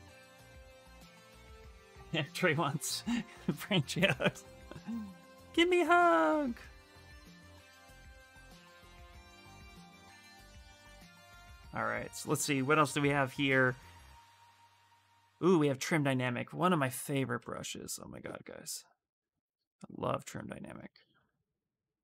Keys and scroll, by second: 11.8 b, 17.5 s.